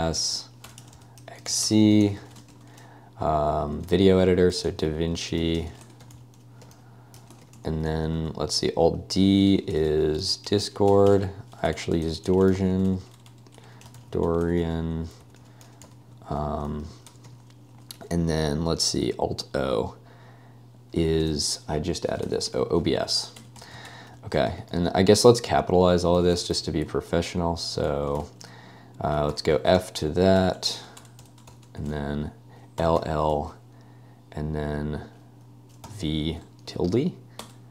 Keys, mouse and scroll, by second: 0.0-8.1 typing, 9.5-17.8 typing, 14.5 Escape, 20.9 space, 22.2-28.2 typing, 29.3-31.5 typing, 32.7-33.5 typing, 35.9 v, 36.7 ~, 37.4 Return.